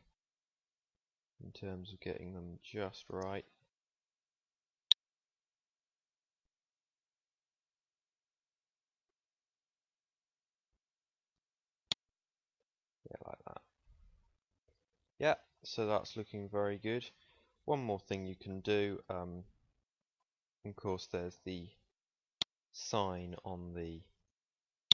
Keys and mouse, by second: 0.1-2.0 middle drag, 4.1 click, 5.6 click, 7.3 s, 12.9 Tab, 14.2 ctrl+s, 15.3 middle click, 17.6 KP_1, 20.2 Tab, 23.4 right click.